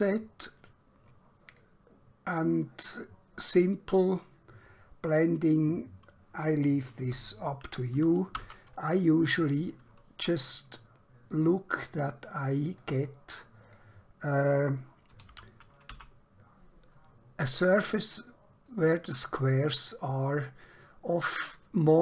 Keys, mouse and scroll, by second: 7.9 typing, 8.4 Return, 12.1 click, 15.1 typing, 16.0 Return, 17.5 middle click.